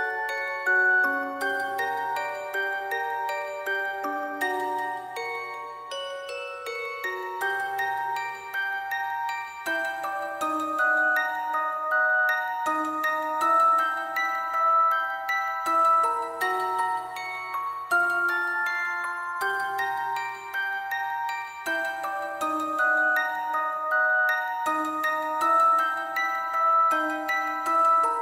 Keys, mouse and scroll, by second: 1.6 scroll down 1, 1.7 scroll up 1, 1.8 scroll down 1, 3.8 scroll down 1, 4.3 double click, 4.6-6.0 typing, 10.7 scroll down 1, 10.8 scroll up 1, 10.9 typing, 14.5 scroll down 1, 16.8 double click.